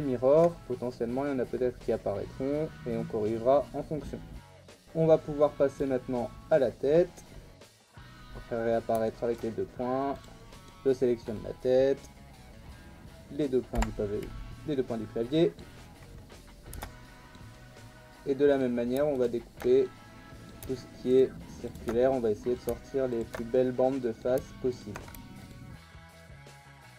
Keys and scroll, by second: 4.6 Tab, 7.6 /, 13.7 /, 16.7 Tab, 25.7 ctrl+e, 26.3 ctrl+z.